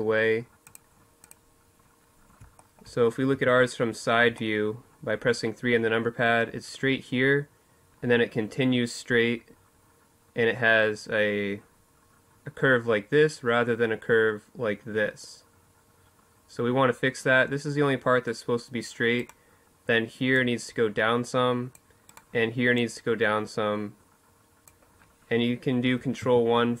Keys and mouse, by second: 1.3 middle click, 2.1 KP_3.